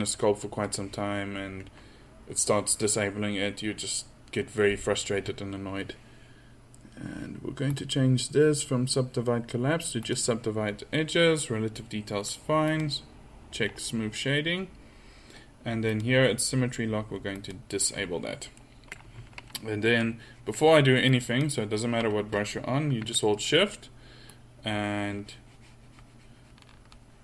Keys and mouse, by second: 7.8-12.1 drag, 13.3-14.6 drag, 14.6-15.9 middle drag, 15.9-17.8 drag, 17.8-18.6 middle drag.